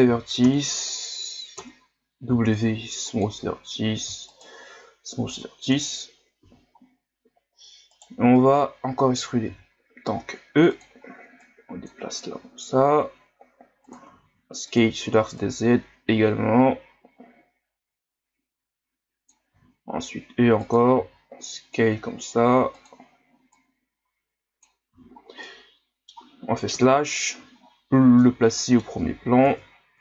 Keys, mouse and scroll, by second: 0.4 ctrl+KP_Add, 1.5 ctrl+KP_Add, 2.3 w, 4.1 w, 5.7 KP_1, 6.4 z, 7.9 right click, 8.1 b, 9.5 e, 11.4 click, 12.3 s, 14.0 s, 15.4-18.4 drag, 23.5-24.9 drag, 24.9 z, 25.2 scroll down 2, 25.4-26.7 middle drag, 26.7 KP_Divide, 27.6 ctrl+scroll down 6, 28.2-29.4 middle drag, 29.4 ctrl+KP_Add.